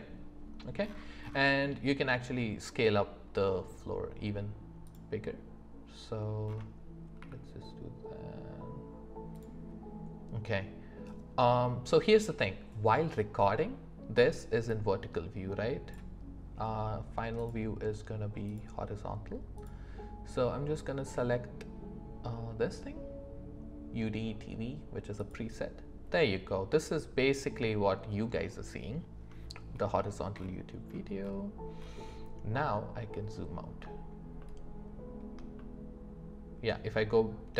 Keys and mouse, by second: 7.2 s, 14.9-33.7 drag.